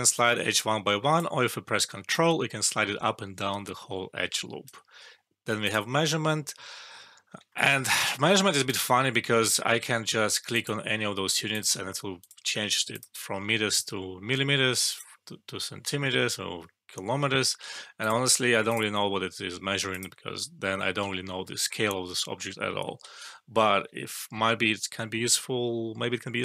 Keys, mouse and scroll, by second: 0.1-1.3 click, 2.1-4.9 ctrl+drag, 7.5 alt+middle click, 7.9 click, 17.9 click, 22.8 click, 23.0 ctrl+z, 23.7 ctrl+z, 26.3 ctrl+z.